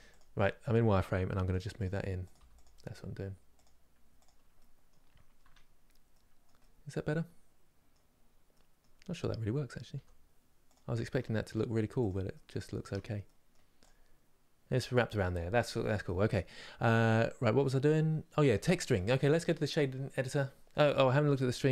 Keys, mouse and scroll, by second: 0.1-1.2 middle drag, 1.2 g, 2.0 click, 2.1 g, 3.2 click, 3.9 click, 4.3 middle click, 4.9 scroll down 1, 5.1 Tab, 5.5 scroll down 2, 6.3-7.8 middle drag, 7.8 scroll down 1, 8.2-9.7 middle drag, 9.7 g, 11.2 scroll down 1, 11.8 click, 12.0 middle click, 12.5 Tab, 13.0 middle click, 13.5 click, 15.8-19.5 middle drag, 19.5 click.